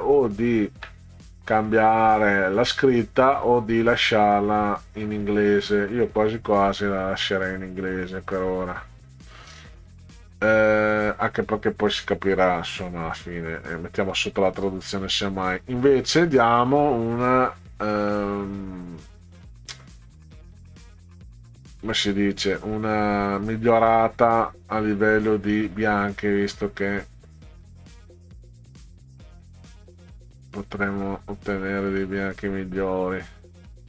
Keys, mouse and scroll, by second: 5.4 middle click, 12.7 middle click, 16.1 click, 19.2 click, 21.8-24.6 drag, 26.0-31.8 drag, 33.3 click.